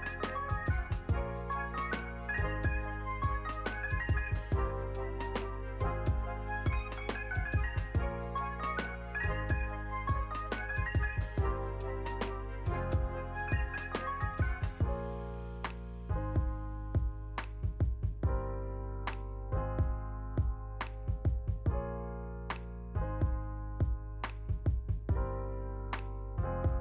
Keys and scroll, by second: 1.3 Return, 1.4-2.8 typing, 7.0 Escape, 8.1 space, 9.8 space, 21.6 a.